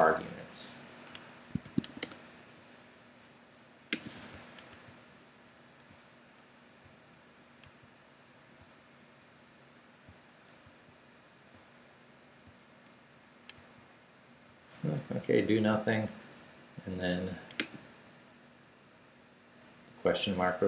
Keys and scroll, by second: 1.1 Escape, 1.6 shift+;, 2.0 Return, 4.7 super+r, 7.6 super+r, 10.6 super+r, 13.5 super+r.